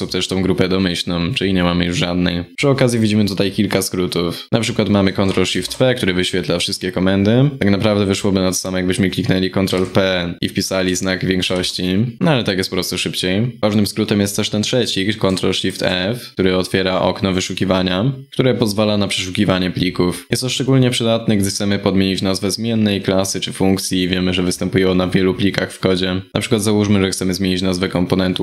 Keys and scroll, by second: 5.1 ctrl+shift+p, 7.6 ctrl+p, 9.3 ctrl+p, 15.1 ctrl+shift+f.